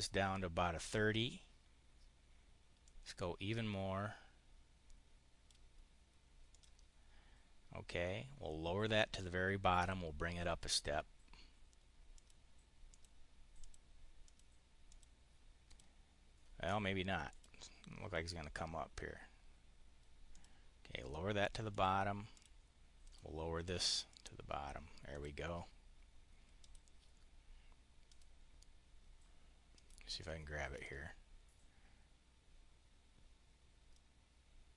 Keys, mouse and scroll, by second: 2.7-5.5 drag, 6.4 click, 8.8 click, 9.6 click, 12.0 click, 12.8 click, 13.5 click, 14.1 click, 14.8 click, 15.6 click, 17.1 click, 20.2 click, 21.6 click, 22.2 click, 22.9 click, 24.0 click, 24.9 click, 26.5 click, 27.8 click, 29.6 click, 30.6-34.7 ctrl+drag.